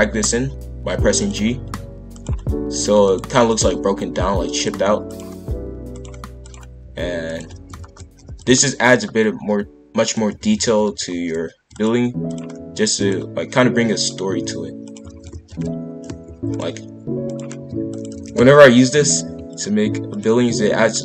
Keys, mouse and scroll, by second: 1.2 click, 1.6 g, 3.0 click, 3.5 click, 3.6 g, 5.1 click, 5.5 g, 6.4 click, 6.8 g, 7.5 shift+f, 8.9 click, 9.3 g, 10.3 shift+f, 12.2 click, 12.5 g, 13.9 click, 14.4 g, 15.1 shift+f, 17.2 click, 17.6 g, 18.1 shift+f, 20.1 click, 20.4 g.